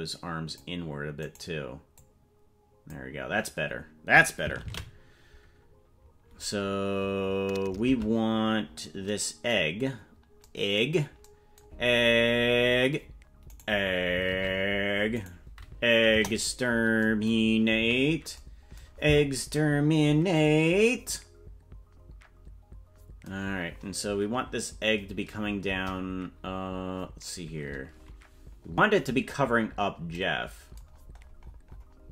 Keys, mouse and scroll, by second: 1.3 right click, 1.9-2.9 drag, 6.8 ctrl+s, 7.8 ctrl+Tab, 8.5-9.2 scroll down 5, 9.6-10.4 scroll down 4, 11.9-12.2 scroll up 1, 13.5 right click, 14.3 ctrl+Tab, 15.2 right click, 16.1 KP_0, 17.7 KP_Decimal, 18.9-19.6 scroll down 9, 25.6 KP_0, 26.9-27.6 scroll up 3, 30.9-32.1 scroll down 18.